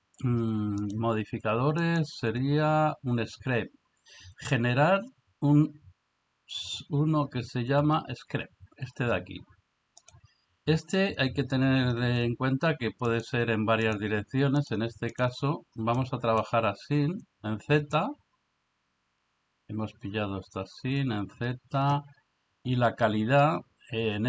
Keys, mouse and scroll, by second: 2.0-10.1 drag, 13.1 click, 13.9 click, 14.6 click, 15.1 click, 16.0-16.4 middle drag.